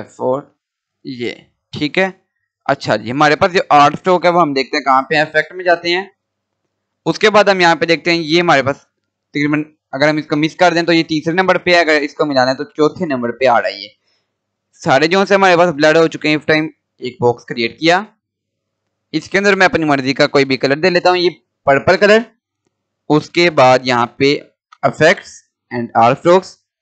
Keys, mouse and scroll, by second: 0.5 shift+F4, 5.8 click, 16.6 click, 16.6-20.3 drag, 22.2 scroll up 1, 23.1 click.